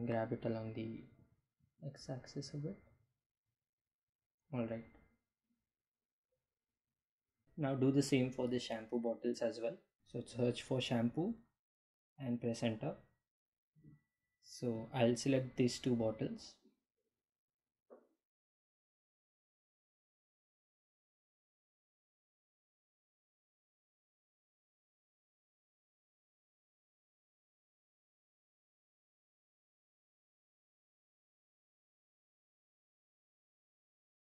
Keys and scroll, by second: 0.1 x, 9.0 b, 10.1-11.3 typing, 12.8 Return, 25.5 g, 25.6 z, 29.4 s, 33.9 Home.